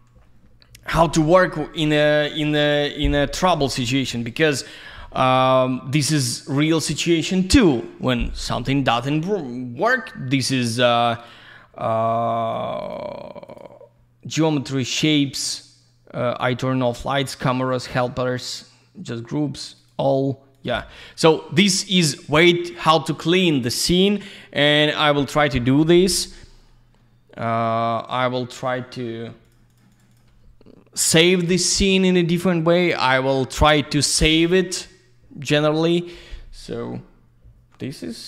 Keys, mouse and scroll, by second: 6.1 ctrl+shift+click, 11.2 ctrl+shift+click, 12.5 ctrl+shift+click, 12.9 ctrl+shift+double click, 13.5 ctrl+shift+click, 13.6 ctrl+shift+click, 19.8 ctrl+shift+click, 19.9 ctrl+shift+click, 20.5 ctrl+shift+click, 20.6 ctrl+shift+click, 29.4 ctrl+shift+click, 29.7 ctrl+shift+click, 29.9 ctrl+shift+click, 30.0 ctrl+shift+double click, 30.1 ctrl+shift+click.